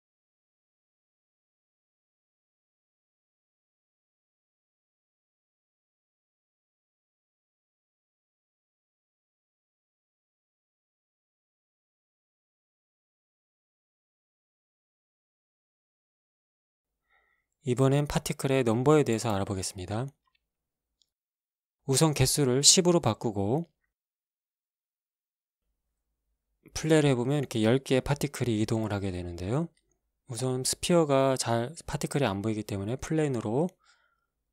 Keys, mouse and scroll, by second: 3.6 click, 6.1 click, 7.0 KP_1, 8.0 Return, 10.4 shift+Left, 11.2 alt+a, 16.5 Escape, 20.9 click, 21.9 KP_1, 22.2 KP_0, 22.8 Return, 23.4 KP_1, 25.4 alt+a, 28.6 alt+a, 29.8-31.4 right drag, 31.4 x, 32.2 click, 33.3 shift+a, 34.2-34.5 drag.